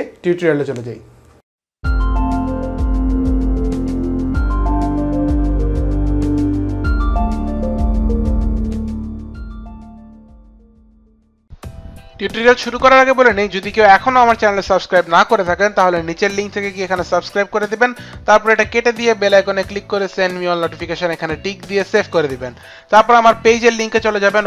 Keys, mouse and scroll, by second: 16.8 click, 18.4 click, 19.6 click, 21.1 click, 21.8 click, 23.4 click.